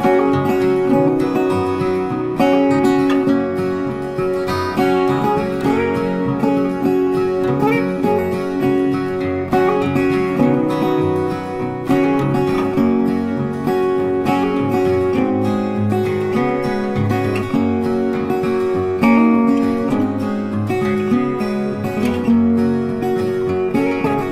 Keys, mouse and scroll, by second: 11.1 m, 13.3 click, 21.5 click.